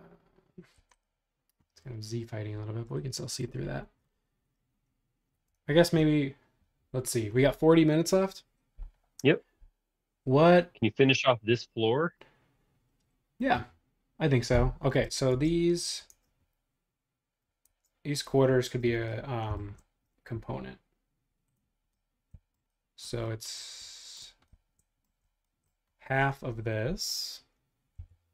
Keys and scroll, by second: 0.8 Escape, 5.6 super+Tab, 15.3 super+Tab, 16.1 super+Tab, 17.7 super+Tab, 28.1 l.